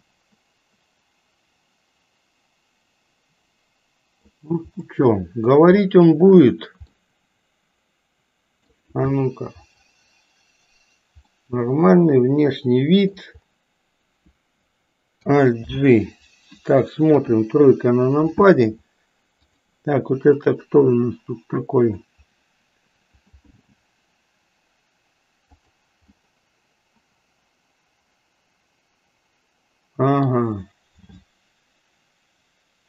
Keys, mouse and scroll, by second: 0.0-4.3 middle drag, 0.0 scroll up 1, 4.9 middle click, 5.9 scroll up 1, 6.1 shift+middle click, 7.0-8.8 middle drag, 9.0 KP_1, 11.1-11.5 scroll up 1, 11.5-13.1 middle drag, 15.6 alt+g, 17.0 KP_3, 19.5 click, 20.5-22.0 middle drag, 23.4 g, 26.1-30.3 middle drag.